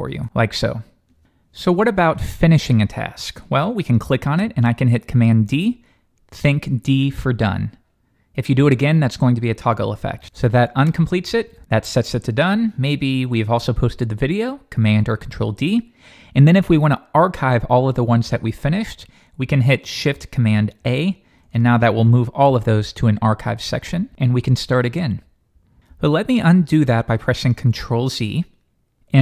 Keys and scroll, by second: 6.1 super+d, 10.8 super+d, 11.5 super+d, 14.9 super+d, 20.8 shift+super+a.